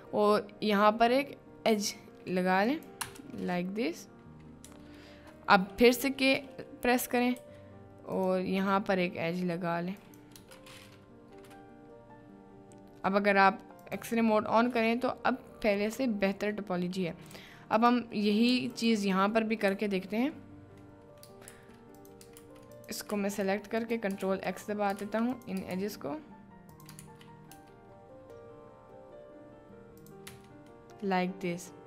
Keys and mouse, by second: 7.3 k, 13.8 middle click, 15.1 click, 15.4-16.4 middle drag, 17.3 3, 17.7 click, 18.5 2, 19.6 KP_Decimal, 21.0 click, 21.5 ctrl+x, 22.0 click, 22.4 ctrl+x, 23.2 ctrl+x, 23.4 ctrl+click, 24.3 ctrl+x, 24.5 click, 25.1 ctrl+x, 25.8 ctrl+x, 26.7 click, 27.2 ctrl+x, 27.5 Tab, 30.0 click, 30.5 Tab, 30.8 middle click.